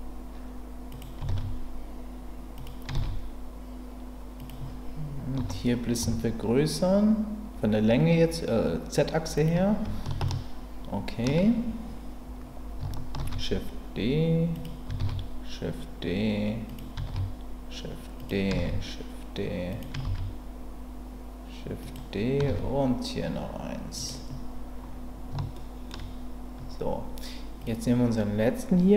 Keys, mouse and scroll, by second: 0.9 click, 2.5 click, 3.0 shift+d, 4.4 click, 5.4 s, 6.0 z, 9.3 click, 10.3 shift+middle click, 13.2 shift+d, 14.5 click, 15.0 shift+d, 16.7 click, 17.1 shift+d, 18.2 click, 18.6 shift+d, 19.7 click, 21.8 click, 22.5 shift+d, 23.9 click, 25.5 shift+middle click.